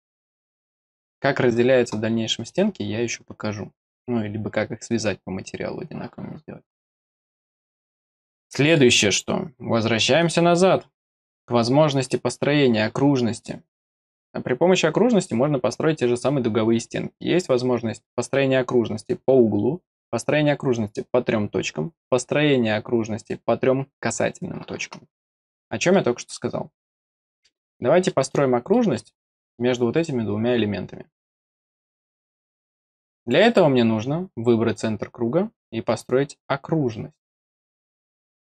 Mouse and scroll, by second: 0.0 scroll up 2, 0.4 middle click, 6.7 scroll down 2, 7.2 middle click, 7.9-8.7 scroll down 4, 10.2 click, 11.0 click, 25.3 middle click, 25.9 middle click, 27.0 click, 27.4 middle click, 28.0 middle click, 28.7 middle click, 29.3 middle click, 31.5 click, 31.9 click, 32.4 click, 33.2 click, 34.6 click.